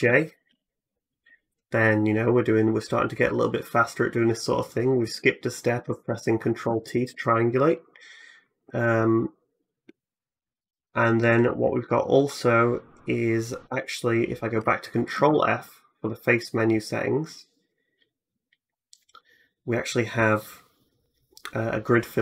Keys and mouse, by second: 0.3 alt+j, 3.5-5.6 drag, 5.9 ctrl+z, 6.5 ctrl+z, 9.5-14.4 drag, 14.9 ctrl+f, 18.1-22.2 drag.